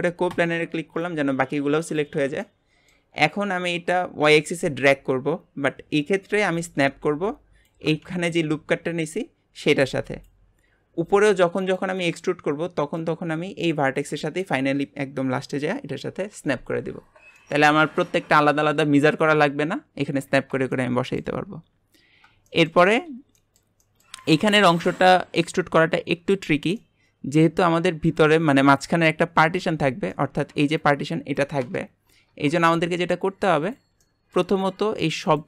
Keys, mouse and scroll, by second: 2.4-3.9 middle drag, 3.9 click, 17.1 scroll down 2, 17.4-18.5 middle drag, 18.5 scroll up 1, 20.7-24.3 shift+middle drag, 24.3 click, 24.8 shift+click, 25.5 scroll up 1, 26.8 middle click, 27.6-28.1 scroll up 1, 28.1 click, 28.7 click, 33.6 click, 34.0 shift+middle click, 34.5 scroll up 1, 35.3 shift+click.